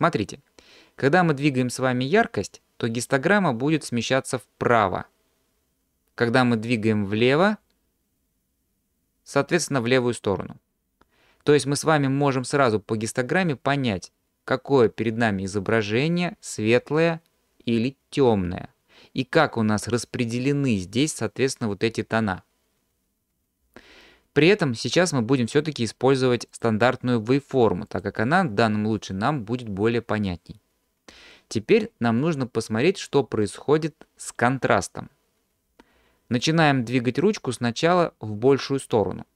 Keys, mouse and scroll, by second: 2.6-5.6 drag, 8.0-12.5 drag, 26.5-28.2 drag.